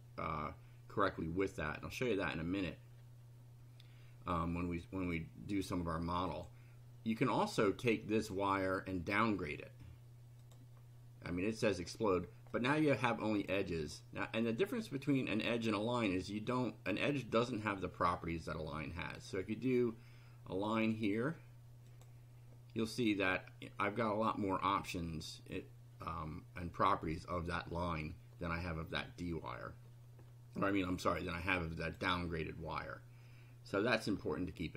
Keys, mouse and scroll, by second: 6.3 click, 8.1 click, 10.4 click, 11.7 click, 12.6 click, 13.0 click, 13.4 click, 14.4 click, 19.2 click, 20.7 click, 21.9 click, 23.8-24.5 drag, 26.1-27.1 drag, 31.8 click.